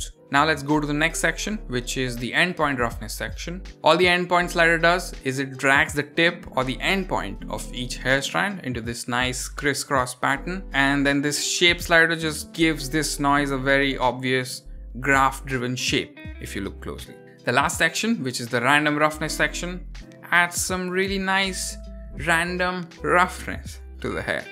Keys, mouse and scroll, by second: 1.7-17.2 drag, 17.2 scroll down 5, 18.5-24.2 drag.